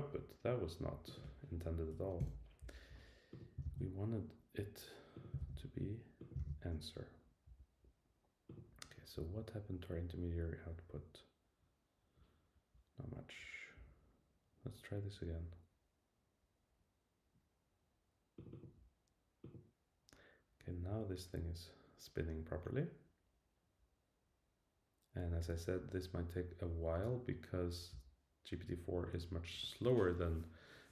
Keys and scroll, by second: 1.9 Right, 3.6 super+c, 5.4 super+c, 6.4 super+v.